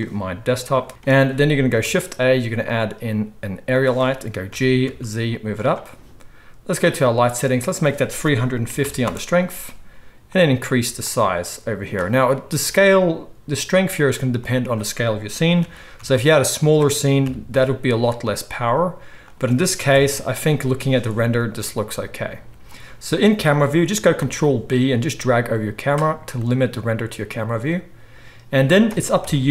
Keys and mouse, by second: 1.8 shift+a, 4.5 g, 5.7-6.8 middle drag, 6.8 click, 6.9-7.6 middle drag, 7.6-16.7 drag, 15.6 g, 16.7-19.9 middle drag, 17.2 KP_3, 17.9 z, 19.9 KP_0, 23.9-29.5 ctrl+middle drag, 24.1 ctrl+b, 29.2 KP_1.